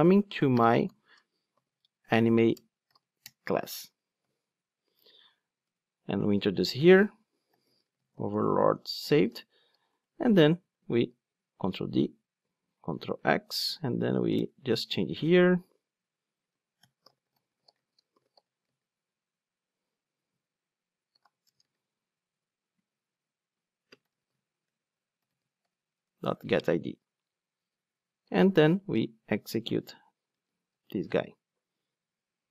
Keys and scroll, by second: 2.6 Return, 5.3 alt+Return, 10.9 super+d, 11.7 super+x, 13.1 super+v, 25.0 Return, 30.8 ctrl+shift+d.